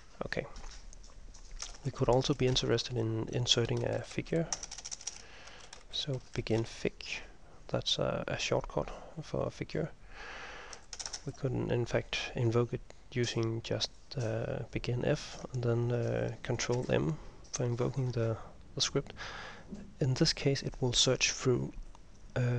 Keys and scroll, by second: 1.7 typing, 1.8 Return, 2.6 Return, 3.6-7.1 typing, 9.0-9.7 typing, 16.9 ctrl+m.